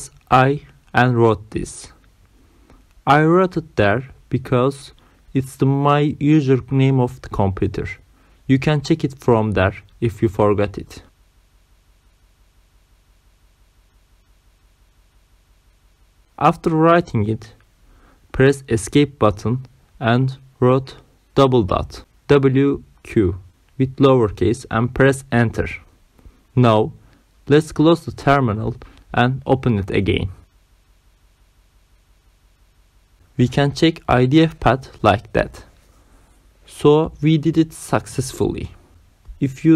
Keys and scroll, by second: 0.0-1.1 typing, 11.4 Right, 12.1 Left, 12.9 shift+Left, 18.2 Escape, 19.7 shift+., 21.5 w, 21.9 q, 22.4 Return, 34.2-36.4 typing, 36.8 Return.